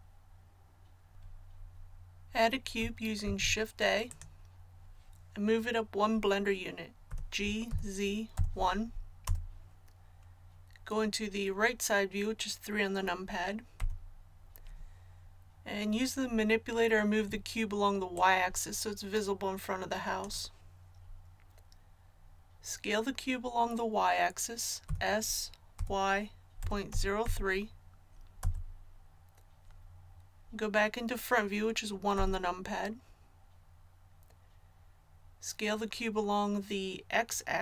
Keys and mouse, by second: 3.2 shift+a, 7.0 g, 13.7 KP_3, 18.1-20.0 drag, 24.8 s, 32.1 KP_1.